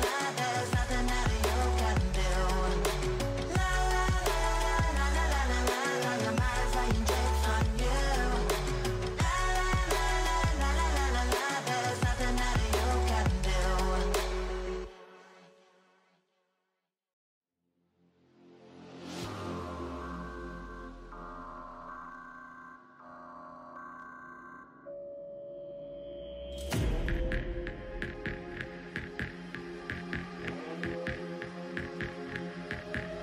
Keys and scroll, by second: 5.7 2, 6.5 5, 7.3 0, 11.1 7, 11.6 0, 23.8 3, 24.4 0, 30.6 3, 31.2 0.